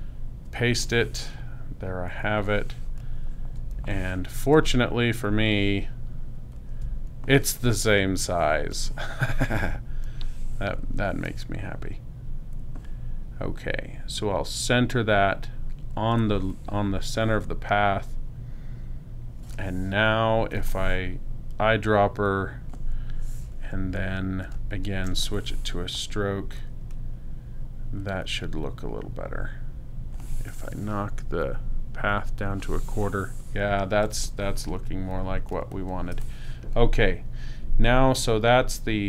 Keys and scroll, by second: 0.5 super+v, 3.6 space, 6.8 super+space, 20.4 i, 34.0 space.